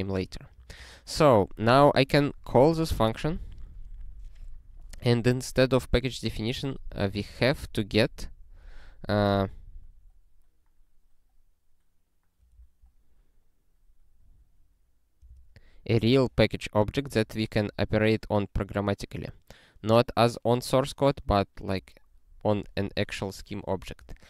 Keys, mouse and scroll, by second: 0.0-1.4 typing, 2.6 ctrl+n, 2.7 ctrl+n, 2.9 ctrl+n, 3.3 Return, 3.7 space, 12.5 ctrl+a, 15.2 ctrl+space, 15.3 ctrl+n, 16.0 ctrl+w, 16.9 scroll up 1, 17.7 scroll up 1, 19.2 scroll up 1.